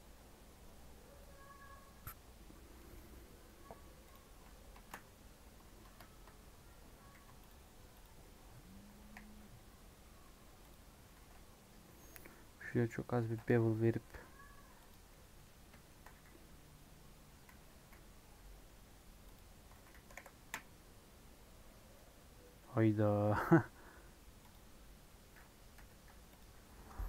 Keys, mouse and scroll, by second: 0.4 scroll down 3, 2.7-4.1 middle drag, 4.1 click, 4.7 shift+middle click, 5.0 Tab, 5.1 scroll up 2, 6.5 scroll up 2, 7.1 ctrl+r, 8.2 middle click, 9.0 KP_1, 9.6 3, 10.7 click, 13.1 ctrl+b, 15.0 middle click, 15.4 scroll down 2, 15.8 shift+middle click, 16.1 e, 19.8 s.